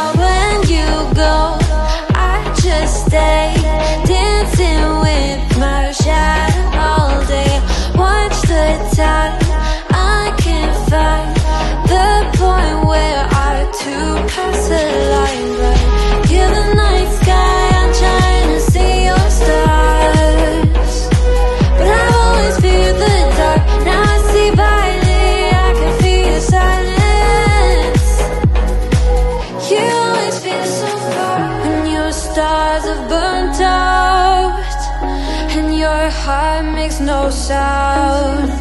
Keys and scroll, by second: 0.6 super+t, 8.8 shift+super+], 14.4 alt+super+g, 15.5 super+t, 21.8 shift+super+], 22.7 ctrl+super+s.